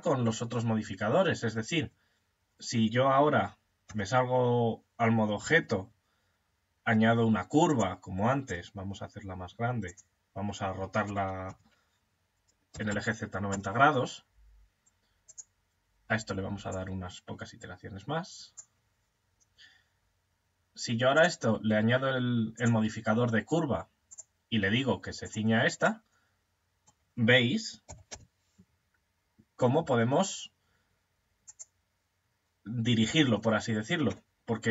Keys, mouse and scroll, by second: 1.1 shift+a, 3.2 Tab, 4.8 shift+a, 8.0 s, 10.5 r, 14.7 right click, 16.1 click, 20.6 click, 23.6-25.5 drag, 25.5-27.3 middle drag, 27.3 g, 34.3-34.7 middle drag.